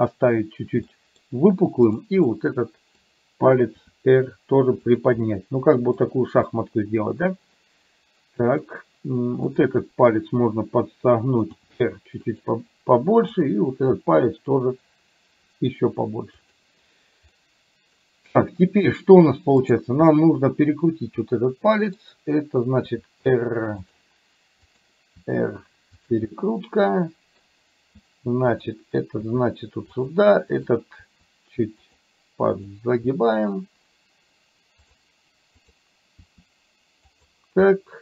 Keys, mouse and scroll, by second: 0.9 middle click, 1.9 click, 2.4 middle click, 3.9 r, 5.3 middle click, 6.5-8.7 middle drag, 11.5 r, 13.4 click, 13.9 r, 17.3 middle click, 20.2-22.0 middle drag, 22.9 r, 24.9 click, 25.3 r, 26.3-27.4 middle drag, 28.5 click, 29.2 r, 30.7 click, 31.0 r, 32.5 click, 33.0 r, 35.7 click, 36.2 r, 37.8 middle click.